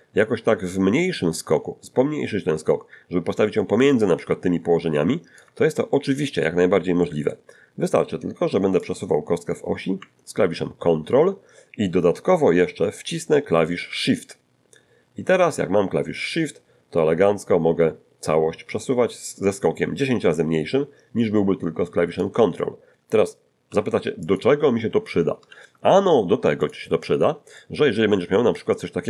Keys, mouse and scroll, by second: 5.9 ctrl+middle click, 7.0 middle click, 8.8-22.4 drag, 23.7 x, 24.3 click, 25.5 shift+a, 26.6 click, 27.3 scroll down 2, 27.5-28.8 middle drag.